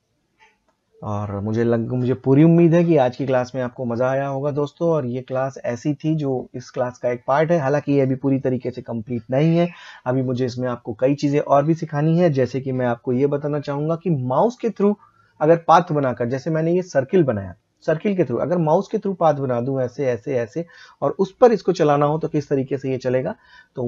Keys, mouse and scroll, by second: 6.0-10.4 drag.